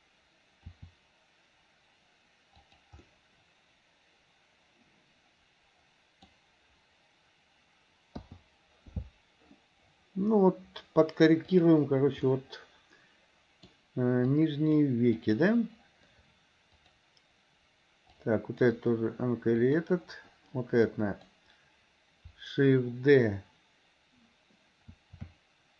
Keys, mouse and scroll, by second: 0.7 r, 3.1-6.3 middle drag, 6.3 scroll down 1, 11.6 click, 12.3-13.7 middle drag, 14.3-14.8 drag, 15.3 click, 16.9 click, 18.2-18.6 drag, 19.7 click, 20.9-21.3 drag, 25.1 shift+d.